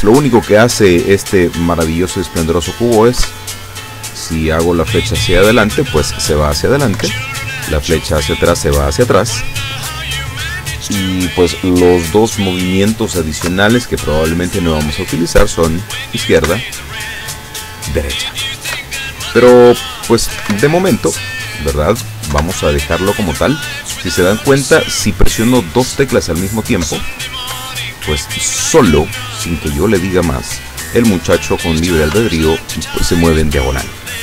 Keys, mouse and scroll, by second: 3.3 Up, 7.1 Down, 13.5 Left, 16.5 Right, 18.8 Left, 20.4 Right, 20.6 Up, 22.4 Right, 26.9 Up, 31.4 Right.